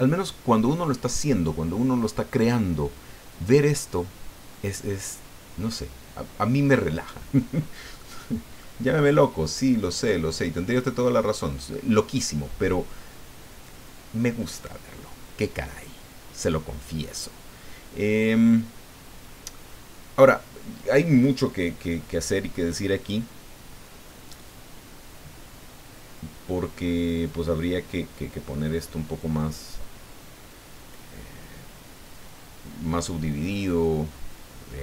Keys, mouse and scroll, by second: 7.9 middle click, 9.5 scroll down 1.